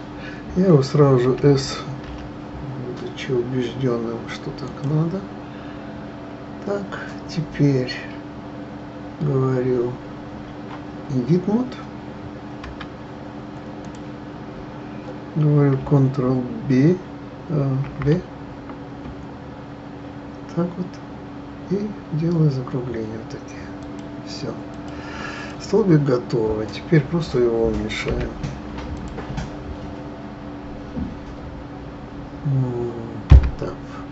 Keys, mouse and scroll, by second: 1.2 s, 5.8-7.3 scroll up 2, 12.6 Tab, 13.8 click, 17.8 ctrl+b, 24.7 click, 25.3 click, 25.9-26.4 scroll down 2, 27.7-28.0 scroll down 1, 28.1 s, 28.9 click, 33.3 Tab.